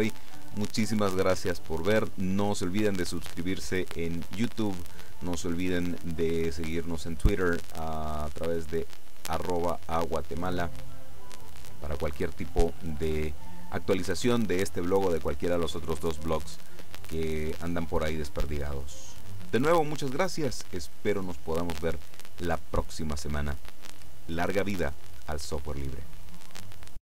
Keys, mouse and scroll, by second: 26.5 click.